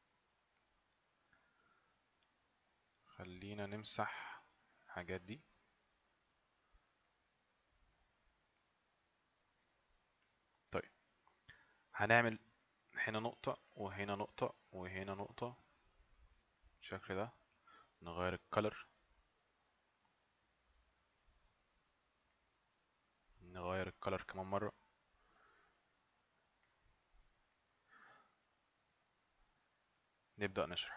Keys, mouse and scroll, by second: 0.6 click, 3.7 click, 5.7 click, 30.0 click.